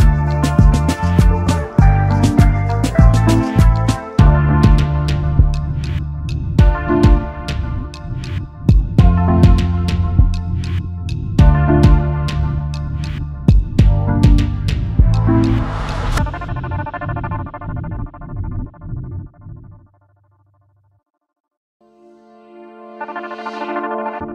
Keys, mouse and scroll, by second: 3.5 ctrl+f, 5.3 alt+scroll down 1, 6.2 alt+scroll up 1, 6.3 alt+scroll down 1, 6.4-6.9 alt+scroll up 1, 8.9 alt+scroll down 1, 10.8 space, 12.5 alt+scroll down 1, 14.0 double click, 17.4 space, 18.9 ctrl+F11, 19.6-19.9 alt+scroll up 1, 20.3 double click, 20.6 space, 21.1 alt+scroll down 1, 24.2-24.3 alt+scroll up 1.